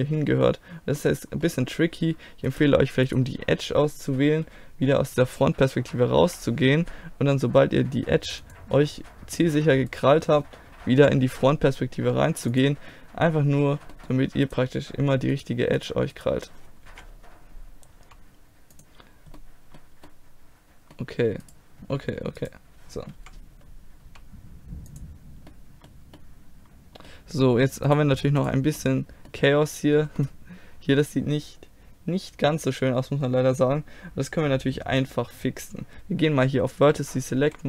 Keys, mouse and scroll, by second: 0.3 click, 1.0-3.3 middle drag, 3.3-4.9 drag, 4.9 middle click, 5.9 KP_3, 6.3 KP_1, 7.3 g, 8.9-9.9 middle drag, 9.9-11.0 drag, 11.0 KP_1, 12.0 g, 14.5-16.4 right drag, 16.4 click, 16.9 KP_1, 18.0 g, 19.4-20.8 middle drag, 21.5-23.2 right drag, 23.2 KP_1, 24.1 g, 25.5-26.9 middle drag, 27.9 click, 28.8-30.4 drag, 30.4-32.4 middle drag, 35.0-36.9 drag, 37.5 z.